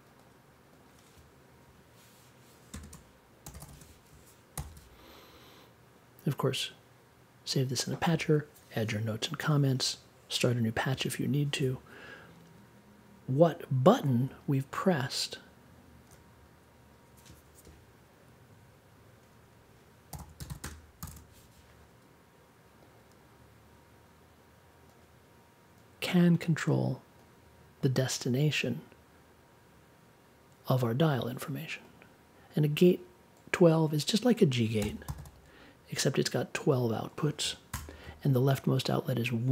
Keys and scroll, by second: 2.7-4.1 typing, 4.5 super+j, 19.8-21.0 typing, 34.8 n, 37.7 BackSpace.